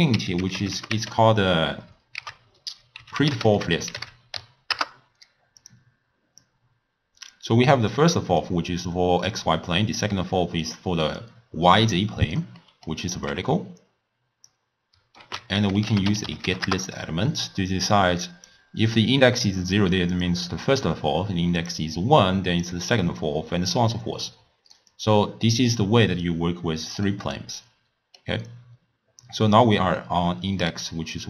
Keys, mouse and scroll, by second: 6.4 drag, 7.9 drag, 10.7 click, 12.6 middle click, 13.3 click, 15.2 ctrl+a, 18.0 click, 20.2 click, 21.6 click, 22.6 click, 24.9 drag, 27.1-31.2 middle drag.